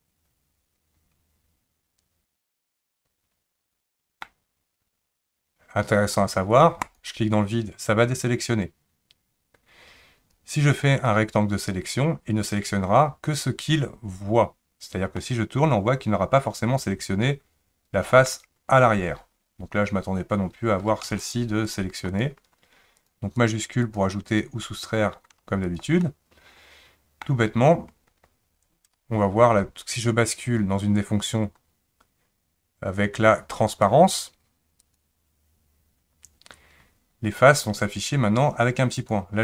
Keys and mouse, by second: 6.8 click, 11.1-12.6 drag, 15.2-18.3 middle drag, 21.2 shift+click, 22.1 shift+click, 23.0 shift+click, 23.8 shift+click, 26.0-27.2 middle drag, 33.8 click, 34.8 click, 39.0 click.